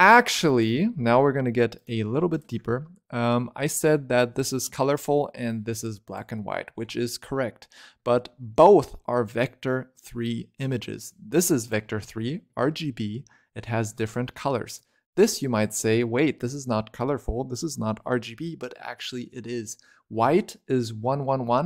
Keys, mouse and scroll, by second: 0.0-0.4 scroll down 1, 0.4 click, 1.6 ctrl+right click, 2.2-3.5 ctrl+right drag, 3.5 click, 5.4 click, 8.0-10.0 scroll down 1, 10.9 click, 14.6 click, 16.4-18.5 scroll up 1, 18.5-18.8 scroll down 2, 18.8-20.0 scroll up 4.